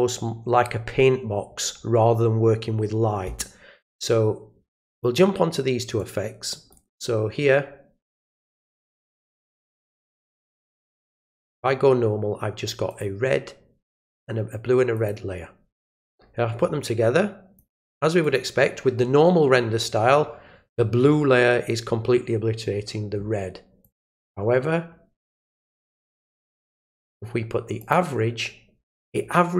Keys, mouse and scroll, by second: 4.9 click, 6.0 click, 8.1 click, 9.2 click, 10.2 click, 11.5 click, 12.9 click, 14.9 click, 15.9-17.5 drag, 18.2 click, 23.8 click, 27.8 click.